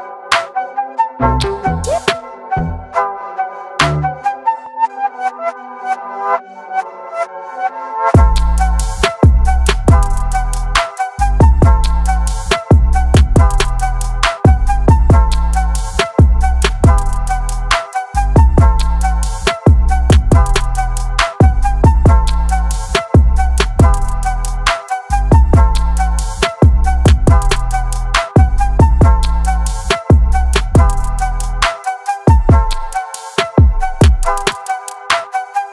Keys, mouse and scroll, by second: 1.4 a, 3.6 shift+Tab, 5.6 click, 7.9 shift+Tab, 9.1 click, 9.3 click, 11.3 click, 12.0 Tab, 14.8-21.1 drag, 21.8 click, 23.9-30.3 drag, 30.3 Tab, 31.9 shift+Tab, 32.5 Up, 34.1-35.7 drag.